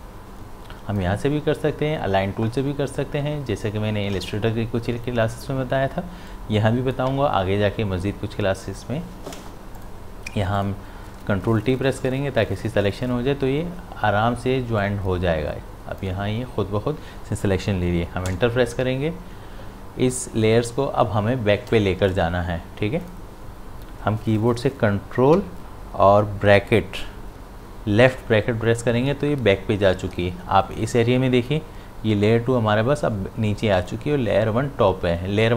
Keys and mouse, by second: 6.3-9.4 drag, 9.8 click, 11.9 ctrl+t, 14.8-19.6 drag, 22.1 right click, 23.0 click, 25.8 click, 28.1 ctrl+[.